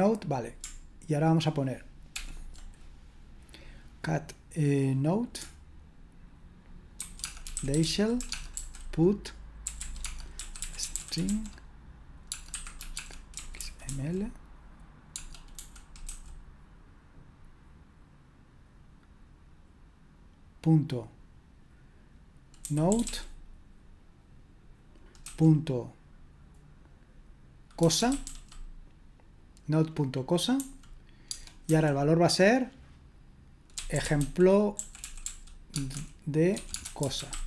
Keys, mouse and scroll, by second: 2.2 ctrl+p, 7.0-14.4 typing, 15.6-16.0 typing, 22.4-23.5 typing, 27.7-28.7 typing, 31.7 typing, 33.5-37.4 typing.